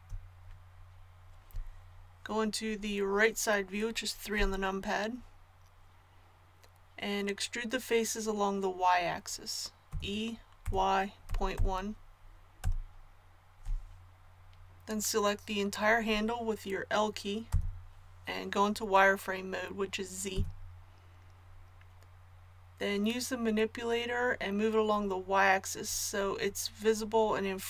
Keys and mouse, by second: 4.3 KP_3, 9.9 e, 17.5 l, 20.3 z.